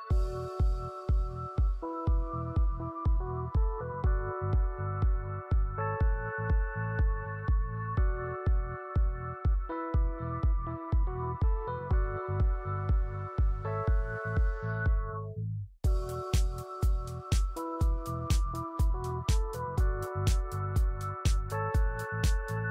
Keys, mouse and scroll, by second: 1.7 scroll up 1, 2.8 scroll down 1, 3.3 click, 4.5 scroll up 1, 4.8 alt+click, 5.3 4, 6.0 click, 8.7-9.1 scroll up 1, 9.4 right click, 10.3-10.7 scroll up 1, 10.8 click, 11.0-12.0 typing, 12.7 click, 14.6 click, 16.4 scroll down 1, 16.5 right click, 17.1-17.5 scroll up 1, 17.6 alt+click, 18.2 right click, 21.0 scroll down 1, 21.1 right click, 22.1 right click.